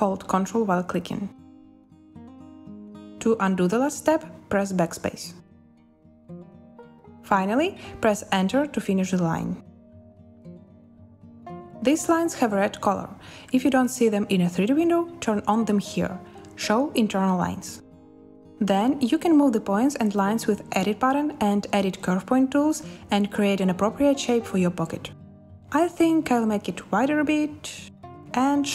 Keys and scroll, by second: 4.6 BackSpace, 8.6 Return, 10.5 z, 19.3 z.